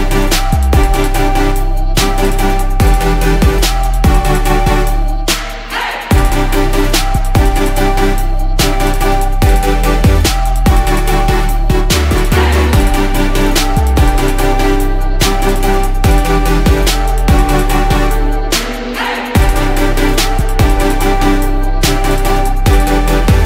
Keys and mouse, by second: 3.0-5.0 drag, 10.9-12.2 drag, 13.4-14.5 drag, 15.9-16.6 drag, 18.7-20.5 drag.